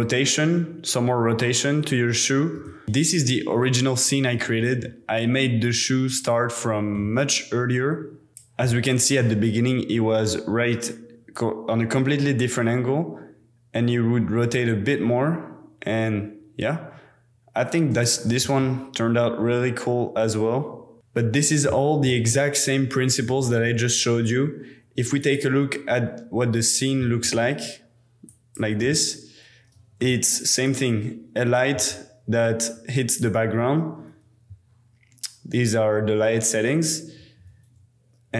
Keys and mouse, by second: 2.8 space, 4.8-5.5 drag, 8.3 space, 8.4-10.4 middle drag, 11.4-13.6 drag, 13.8-14.1 middle drag, 18.2 middle drag, 18.4 z, 21.0-22.7 middle drag, 25.4 middle click, 27.0 z, 28.9-29.4 middle drag, 30.0-30.6 middle drag, 31.0-33.0 middle drag, 31.7 z, 37.3 h.